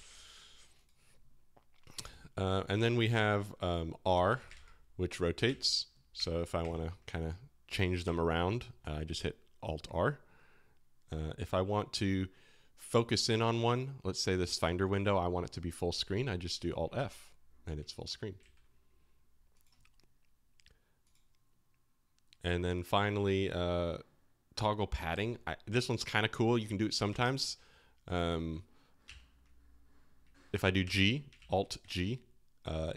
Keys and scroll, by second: 3.1 super+n, 4.1-4.9 typing, 5.6 alt+r, 6.3 alt+r, 6.8 alt+r, 8.2 alt+r, 16.9 alt+f, 18.4 alt+f, 27.0 alt+[, 28.3 alt+[, 29.0 alt+g, 30.8 alt+g, 31.3 alt+g.